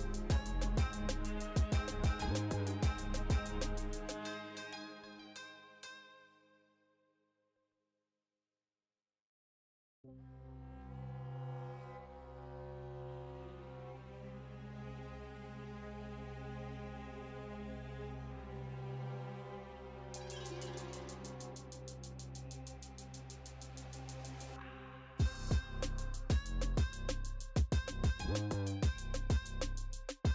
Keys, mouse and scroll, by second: 1.9 right click, 2.3 middle drag, 2.8 g, 3.6 click, 3.6 right click, 3.9 g, 6.3 click, 6.3 right click, 6.4 right click, 7.0 g, 8.3-9.7 drag, 8.3-9.4 scroll up 1, 9.4 right click, 9.7 g, 10.9-11.3 drag, 10.9-11.3 scroll down 1, 11.3-12.6 middle drag, 12.9 click, 12.9 right click, 13.3 g, 14.5 click, 14.5 right click, 14.9 g, 17.7 middle click, 18.0 g, 18.7-19.0 middle drag, 19.1 scroll up 1, 19.3-20.8 middle drag, 21.3 middle click, 21.6 scroll down 1, 21.8 middle drag, 22.5-23.1 scroll down 1, 23.1 right click, 23.4 g, 24.7 middle click, 25.0-25.7 scroll down 1, 25.7 right click, 26.8 click, 28.1 right click, 28.6 shift+right click, 29.5-30.0 drag.